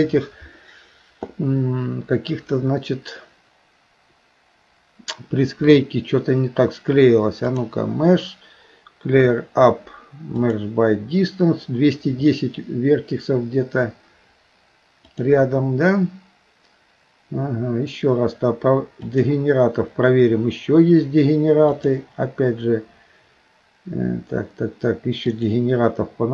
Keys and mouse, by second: 7.6-10.7 drag, 15.2-19.3 drag, 21.8-25.6 drag.